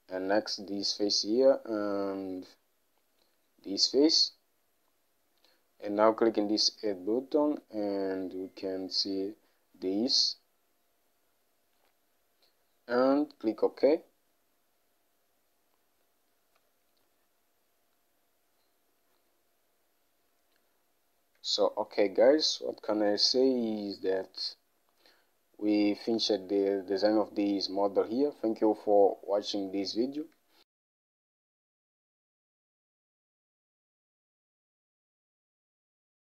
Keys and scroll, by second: 16.7 Home.